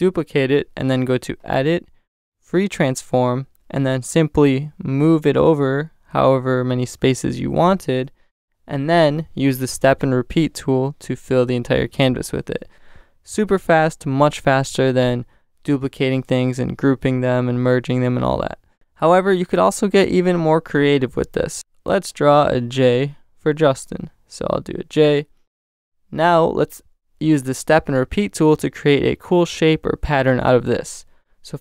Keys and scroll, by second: 7.9 Return, 13.3 alt+shift+super+t, 14.5 alt+shift+super+t, 15.1 alt+shift+super+t, 15.8 alt+shift+super+t, 16.5 alt+shift+super+t.